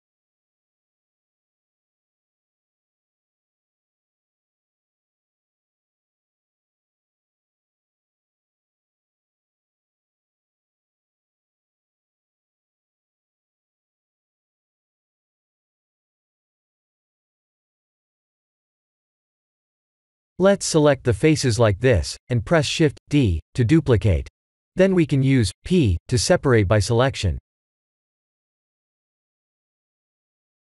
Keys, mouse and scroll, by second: 2.7-3.1 middle click, 2.9 middle click, 2.9 middle click, 6.6 shift+middle click, 7.6 click, 8.0 Tab, 8.6 middle click, 9.9 scroll up 1, 10.3 3, 10.7 click, 11.1 middle click, 12.0-12.5 scroll up 2, 14.5 shift+click, 14.7 shift+click, 15.4 shift+click, 17.9 ctrl+click, 18.9 middle click, 19.5 middle click, 19.6 middle click, 21.8 middle click, 22.9-24.9 middle click, 24.6 middle click, 24.7 middle click, 25.1 middle click, 25.2 middle click, 25.4 middle click, 25.8 middle click, 25.9 middle click, 25.9 middle click, 28.4 shift+d.